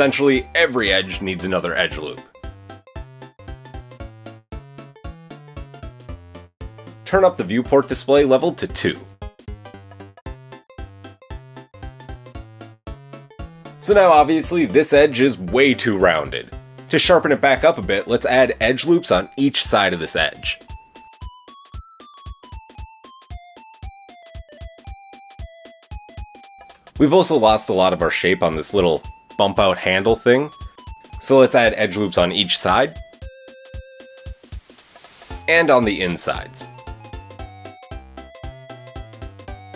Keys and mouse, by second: 1.6-5.0 shift+drag, 2.1 KP_1, 3.2 ctrl+r, 5.0-8.0 shift+middle drag, 5.5 ctrl+r, 8.0-11.8 drag, 8.7 Tab, 9.2 Tab, 9.8 ctrl+r, 11.8-15.9 middle drag, 12.1 KP_7, 13.0 KP_7, 16.2 ctrl+r, 20.4 ctrl+r, 23.0 Tab, 24.4 Tab, 25.5 Tab, 26.0-31.0 middle drag, 26.7 Tab, 27.6 KP_7, 29.7 KP_1, 30.9 ctrl+r, 32.2 ctrl+r, 34.1 KP_8, 34.4 KP_7, 35.3 ctrl+r, 36.1 ctrl+r, 37.9-39.7 middle drag, 38.9 Tab.